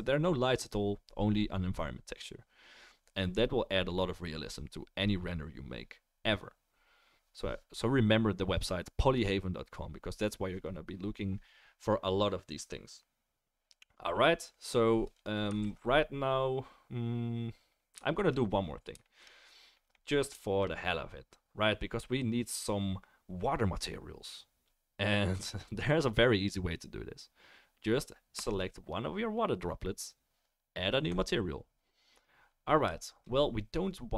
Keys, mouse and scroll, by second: 13.9-28.5 right drag, 15.1 click, 15.6 ctrl+s, 17.5-28.5 middle drag, 28.4-31.1 drag.